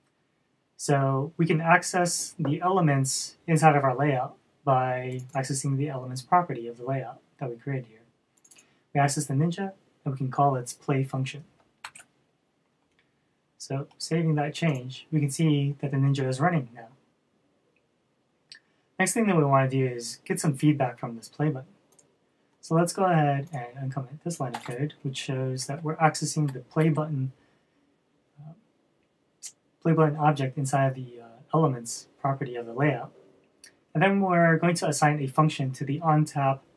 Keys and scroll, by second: 12.4 super+s.